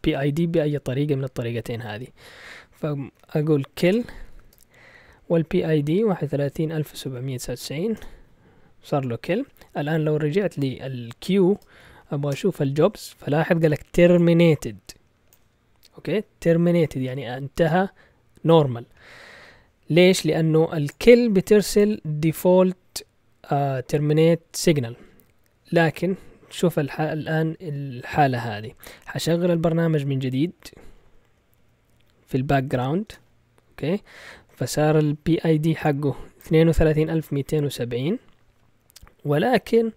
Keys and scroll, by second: 3.1-4.4 typing, 5.7-7.9 typing, 10.0-13.8 typing, 27.3 Up, 27.8-31.9 typing, 33.0-33.7 typing.